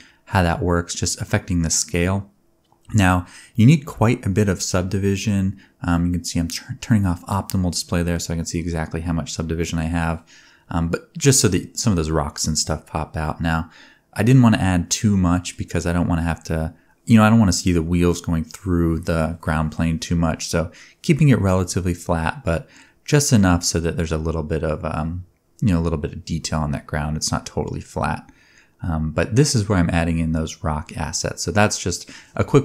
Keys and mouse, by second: 0.4 z, 2.5-3.7 middle drag, 3.7 click, 4.0 middle click, 4.1 click, 4.4 z, 4.8 ctrl+shift+click, 5.2 ctrl+shift+s, 9.1-14.1 shift+drag, 15.6-17.5 drag, 17.8 click, 18.5-19.6 shift+drag, 19.6 middle click, 20.0-28.8 drag, 28.8-29.2 middle drag, 29.6 KP_7, 29.6 middle click, 29.9 g, 30.3 r, 32.0 g.